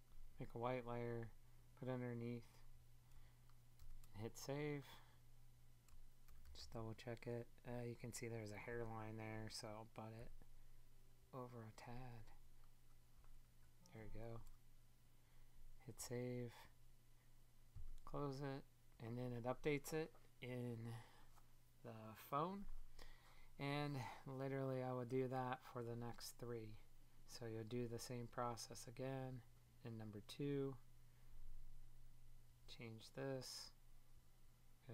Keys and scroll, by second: 10.1 Left, 13.5 Right.